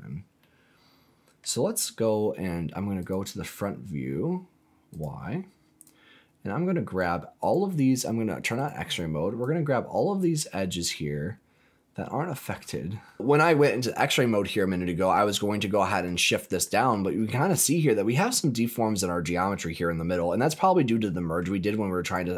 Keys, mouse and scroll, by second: 0.3-1.4 middle drag, 1.4 scroll down 2, 2.9 click, 4.9 click, 5.8-7.0 drag, 7.3 click, 8.5 click, 9.3 click, 10.9-12.3 middle drag, 12.5-13.0 scroll up 2, 13.0 middle click, 13.2 scroll up 1, 14.4-14.8 scroll down 2, 14.8 middle click, 15.5 middle click, 16.6 middle click, 17.1-17.5 scroll up 3, 17.7 shift+middle click, 18.4-18.7 scroll up 2, 18.7 middle click, 19.7-21.3 middle drag, 22.0 click.